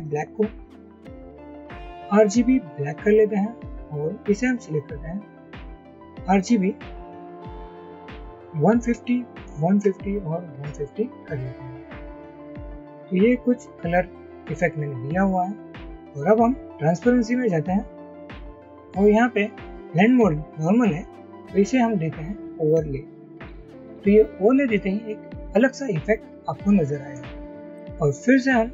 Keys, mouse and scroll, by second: 0.2 double click, 4.6 double click, 8.3-11.8 typing, 10.1 Tab, 27.2 scroll up 1, 27.5-27.8 scroll down 1.